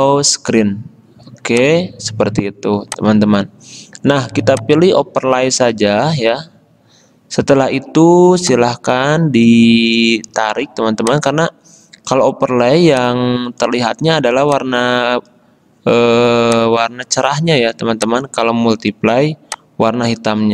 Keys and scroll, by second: 6.2 g.